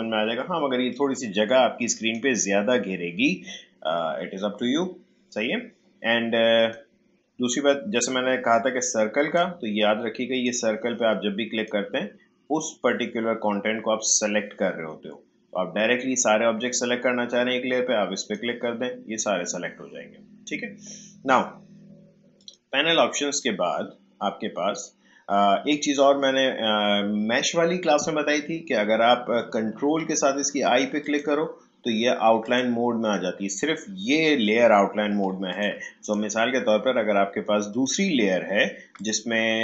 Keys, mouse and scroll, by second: 0.9-10.3 drag, 18.2 click, 22.3 click, 29.5 click, 31.0 ctrl+click.